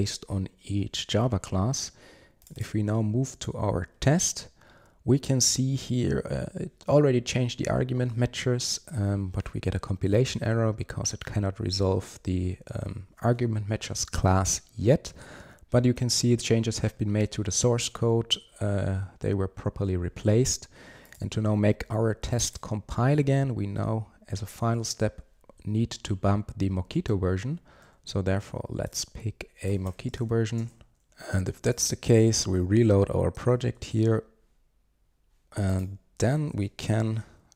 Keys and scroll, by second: 30.7 ctrl+space, 31.0 super+s, 31.8 shift+super+i, 33.5 super+1.